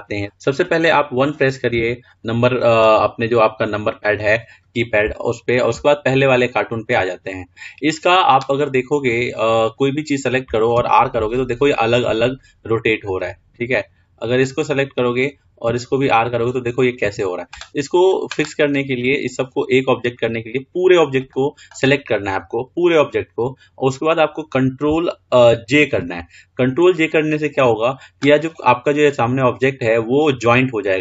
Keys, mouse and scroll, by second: 0.0 t, 2.1 KP_1, 3.6-5.4 scroll up 2, 5.4-6.5 shift+middle drag, 6.5 scroll up 1, 6.8-9.3 scroll down 3, 9.3 click, 9.9 drag, 11.1 r, 13.3 click, 16.0 r, 19.5 click, 26.4 ctrl+j, 27.8-28.2 drag.